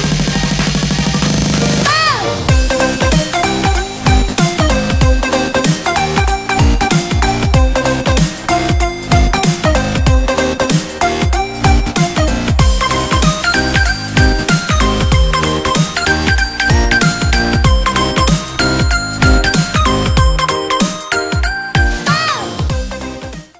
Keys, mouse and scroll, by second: 0.7 click, 1.0-4.5 shift+middle drag.